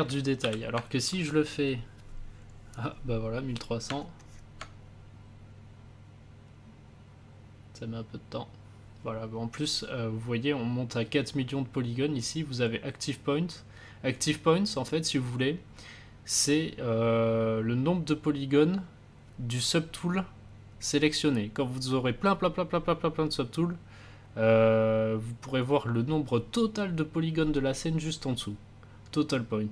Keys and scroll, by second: 0.3 ctrl+z.